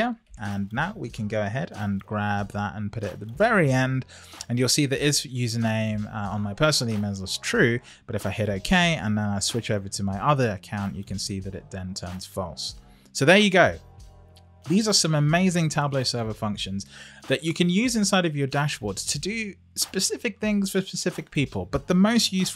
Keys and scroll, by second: 0.1 Up.